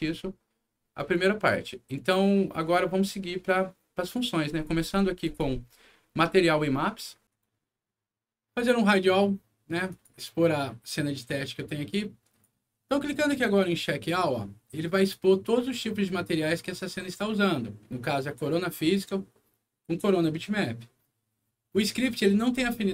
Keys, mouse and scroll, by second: 0.9 click, 5.2 click, 8.4 right click, 9.8 click, 11.5 click, 14.0 click.